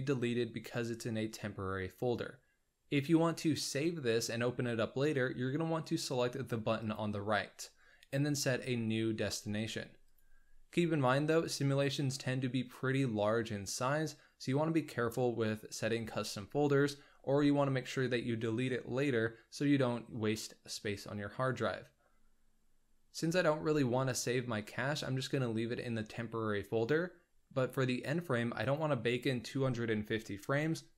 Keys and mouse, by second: 6.7 click, 10.0 click, 28.6-30.9 drag.